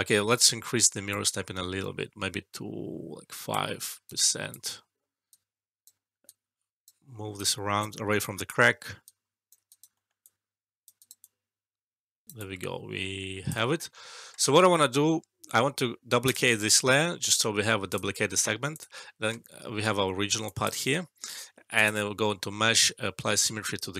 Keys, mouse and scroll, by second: 1.0-3.5 drag, 3.8 alt+right click, 4.4 alt+click, 5.3-5.9 right drag, 8.2 alt+click, 9.0-9.6 right click, 9.9 alt+middle click, 10.2-10.8 alt+click, 11.0 alt+right click, 11.2-13.6 alt+click, 12.2 alt+middle click, 12.3-14.4 alt+drag, 14.4 alt+middle click, 16.2 click, 20.4 alt+click.